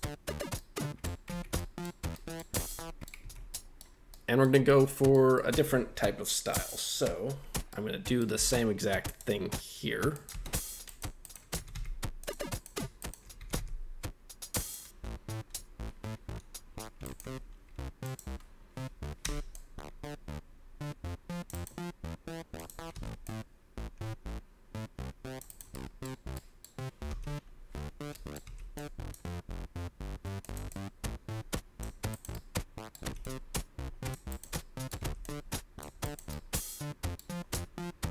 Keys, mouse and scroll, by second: 0.5-1.0 middle drag, 1.3 Tab, 1.5 middle click, 2.1 middle click, 2.5 scroll up 1, 2.7 middle click, 3.2 Tab, 3.3 scroll down 2, 3.5 middle drag, 4.0 scroll up 1, 4.1 middle drag, 4.6 scroll up 1, 4.7-5.1 middle drag, 5.3 middle click, 5.6 Tab, 5.9-6.5 scroll up 1, 6.5 right click, 7.7 middle click, 8.3 k, 10.8 right click, 11.2 right click, 11.5 g, 11.7 g, 12.2 click, 12.5 right click, 13.0 shift+right click, 13.4 g, 13.5 g, 14.6 click, 17.0 shift+right click, 18.0 click, 19.2 c, 21.5 right click, 22.5 click, 22.9 c, 25.4 right click, 25.7 middle click, 26.1 scroll down 1, 26.3 middle click, 27.0 v, 28.1 middle click, 28.4 c, 30.4 click, 30.7-31.8 drag, 32.1 right click, 32.3 middle click, 33.0 c, 34.3 right click, 34.5 middle click, 35.0 c, 36.0 right click, 36.3 middle click.